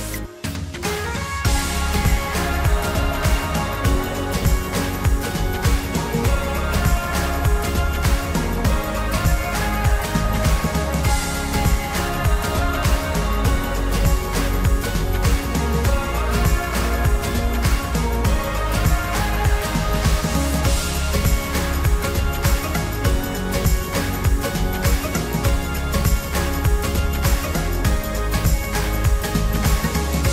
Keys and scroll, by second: 5.1 ctrl+t, 30.0 ctrl+t.